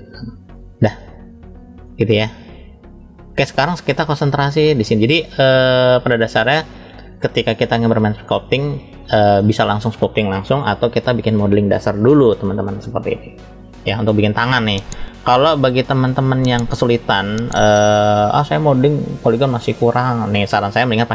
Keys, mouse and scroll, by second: 0.3 click, 3.1 click, 4.1-4.7 middle drag, 5.0-5.8 shift+middle drag, 6.0 scroll up 1, 8.0-8.4 scroll up 1, 8.7 shift+middle click, 15.5 click, 16.5-18.0 middle drag.